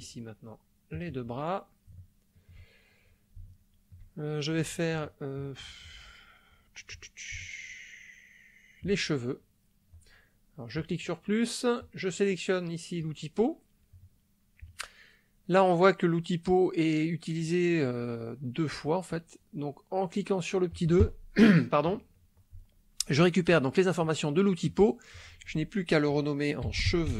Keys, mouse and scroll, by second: 0.9 click, 2.1 shift+middle click, 3.5 shift+middle click, 5.1 shift+middle click, 7.5-9.1 shift+middle drag, 10.7 click, 11.8-13.2 drag, 20.7 click, 24.7 click, 25.1 click, 26.7-27.1 typing.